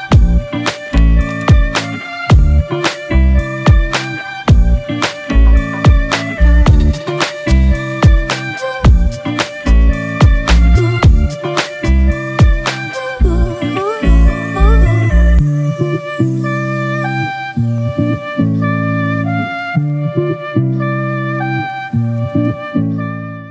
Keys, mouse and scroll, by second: 2.0 double click.